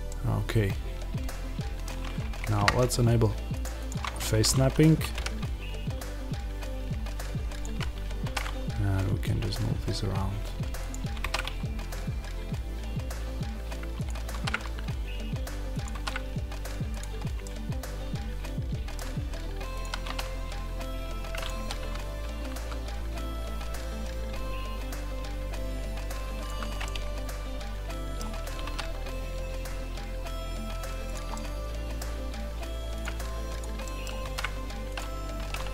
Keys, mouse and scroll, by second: 0.0-4.0 middle drag, 2.3 shift+Tab, 4.0-5.0 scroll down 1, 5.0 g, 7.5 click, 10.8 click, 13.9 click, 15.7 click, 16.9 click, 17.3-17.9 scroll, 19.7 click, 19.9 alt+d, 21.3 click, 21.4 r, 26.3 click, 26.7-31.0 middle drag, 31.0 click, 31.2-32.9 middle drag, 31.9-32.9 scroll, 32.9 click, 33.7 middle click, 34.1 alt+d, 34.8 alt+middle click, 34.9 click, 35.3 r.